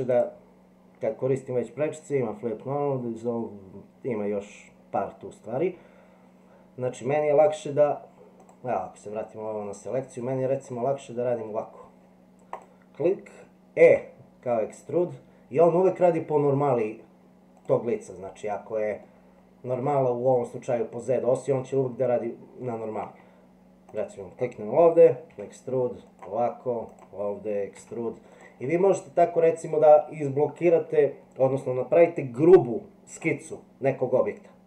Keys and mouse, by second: 8.4 click, 9.7-10.7 middle drag, 13.9 e, 19.2 shift+middle click, 22.7 middle click, 23.9 click, 25.3 e, 26.9 click, 27.8 e, 29.0 middle click.